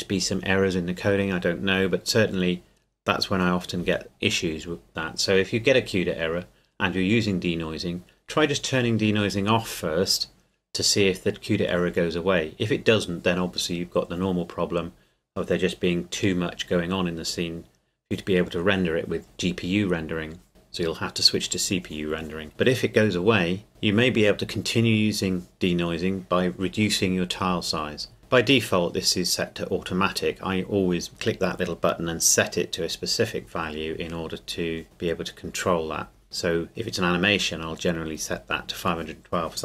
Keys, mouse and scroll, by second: 36.2 scroll up 1.